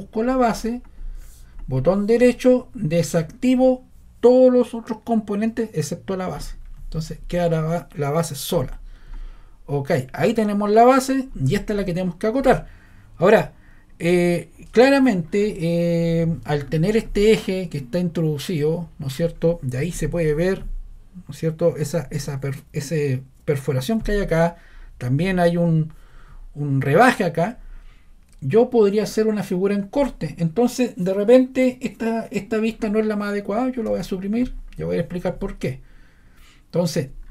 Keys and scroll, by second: 33.9 BackSpace.